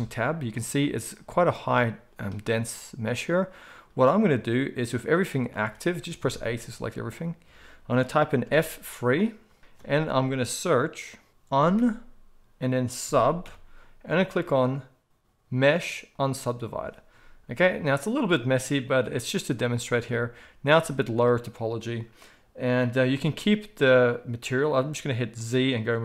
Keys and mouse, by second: 0.0 Tab, 5.5 alt+a, 6.1 a, 8.5 F3, 9.6 F3, 19.9 Tab, 23.1 z.